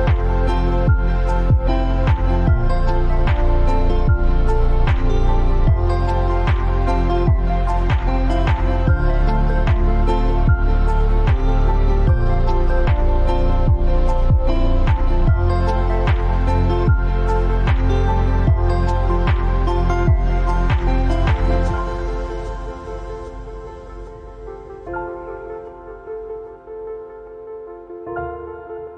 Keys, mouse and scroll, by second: 2.0 t, 2.3 click, 2.9 ctrl+a, 3.6 click, 3.9 scroll down 1, 5.1-6.2 scroll up 1, 6.2-9.3 drag, 10.0-12.2 drag, 14.7 alt+scroll up 1, 14.8 scroll down 1, 15.5 alt+scroll up 1, 15.8 space, 15.9 click, 16.1 space, 17.1 alt+scroll up 1, 17.7-18.3 scroll up 3, 18.7 click, 19.8 click, 20.9 x, 22.7 click, 27.4-28.9 shift+drag.